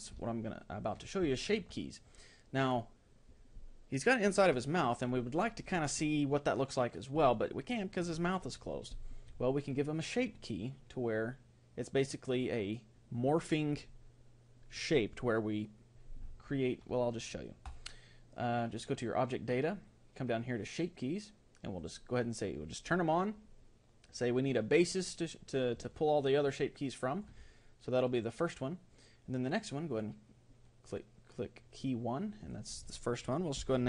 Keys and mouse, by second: 11.4-13.3 middle drag, 17.7-19.5 drag, 19.9-21.8 middle drag, 21.8-24.1 drag, 25.9-29.9 middle drag, 29.9-31.5 drag, 32.5-33.8 drag.